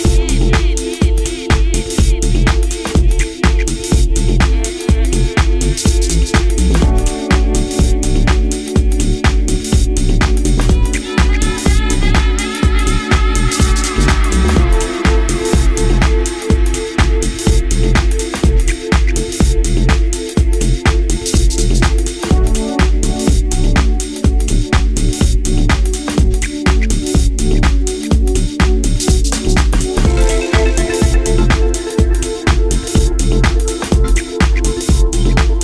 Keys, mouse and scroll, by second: 1.3 right click, 1.6 s, 3.3 click, 4.4 e, 6.6 right click, 7.4 s, 11.2 a, 12.8 click, 15.7 a, 16.1-17.2 scroll up 1, 17.7 scroll up 1, 18.7 ctrl+r, 21.1 click, 21.7 g, 23.6 click, 24.3-25.2 scroll down 4, 25.2 Tab, 25.8 middle click, 28.0-28.4 scroll up 2, 28.4-29.5 scroll down 3, 29.5-29.9 scroll down 3, 29.9 middle click, 31.6-32.1 scroll up 3, 32.1-32.5 scroll down 2.